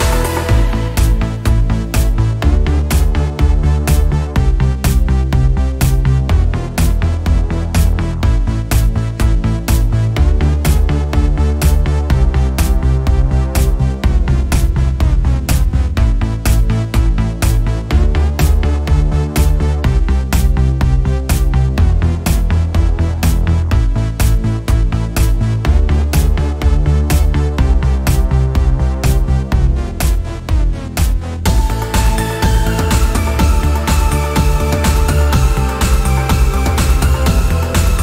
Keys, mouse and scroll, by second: 1.8 scroll down 1, 2.5 click, 2.6-3.0 scroll up 1, 3.0 click, 3.2 scroll up 1, 3.5 click, 4.4 click, 5.3 click, 6.5-6.9 scroll down 1, 7.2 click, 7.9 scroll down 1, 8.5 click, 9.4 scroll up 1, 10.8 click, 11.8 alt+_, 11.9-22.5 drag, 23.5 scroll up 1, 24.0 click, 25.3-25.7 scroll up 1, 27.2-38.0 drag.